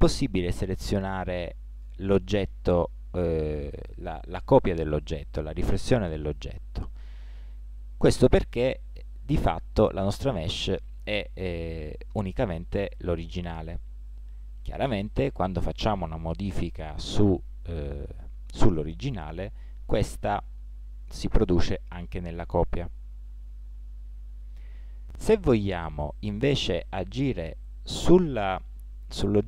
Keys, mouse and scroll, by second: 0.7 Tab, 17.3-18.9 right drag, 20.1 s.